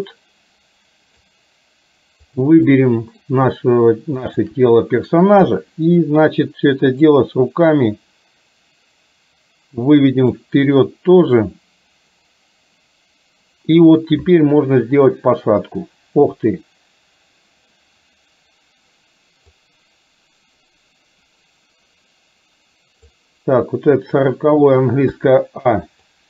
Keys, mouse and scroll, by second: 2.4 click, 2.8-3.4 middle drag, 4.4 shift+click, 5.5 KP_3, 7.1-10.5 drag, 19.6-23.1 drag, 23.6 click, 25.3 a, 26.1 click.